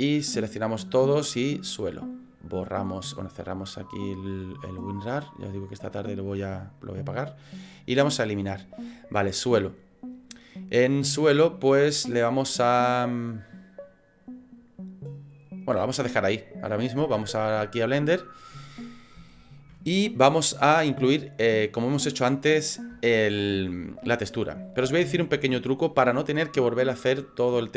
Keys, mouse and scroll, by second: 19.3 shift+middle click, 19.9 middle click, 23.1 shift+middle click, 24.4 middle click, 24.9 shift+middle click.